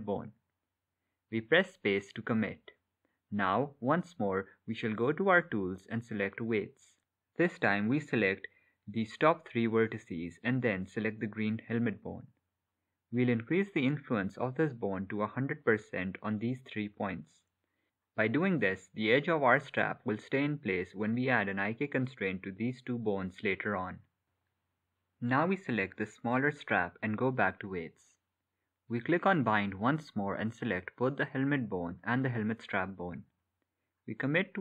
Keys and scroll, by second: 2.9 space, 21.4 space, 33.2 space.